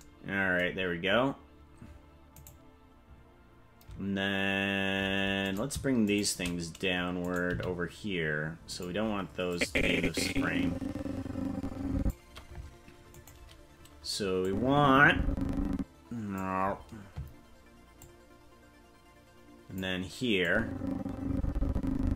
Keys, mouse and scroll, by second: 2.4 right click, 5.5 right click, 6.1 shift+right click, 6.3 shift+right click, 7.2 right click, 7.4 g, 9.5-12.1 drag, 13.2-14.4 right drag, 14.4-16.3 drag, 17.9-19.8 drag, 20.4-22.1 drag.